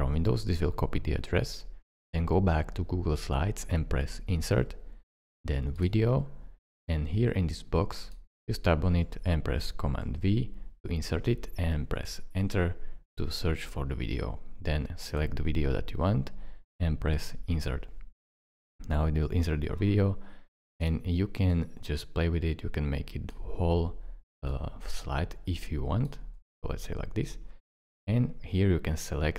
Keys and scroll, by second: 10.1 super+v, 12.1 Return.